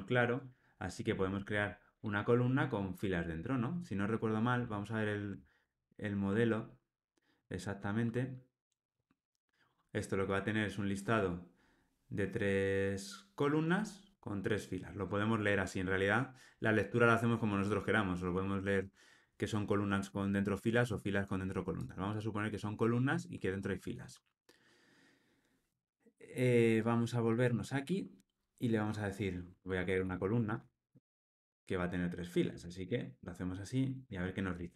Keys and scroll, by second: 5.7 super+b, 22.8 alt+super+[.